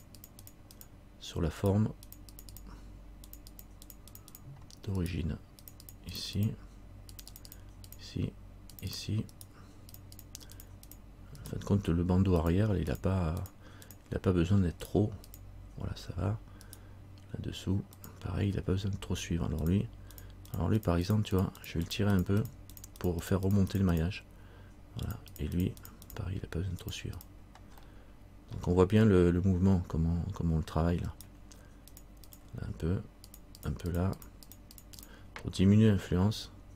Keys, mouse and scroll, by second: 1.8 right click, 2.2 click, 4.3 click, 5.1 right click, 5.8 click, 9.5 right click, 10.1 click, 11.6 right click, 12.6 click, 13.5 click, 14.4 click, 15.0 right click, 15.4 click, 16.8 right click, 18.2 click, 18.8 z, 19.8-21.3 click, 21.5 click, 22.3-27.9 click, 28.6 middle click, 31.2 right click, 32.1 click.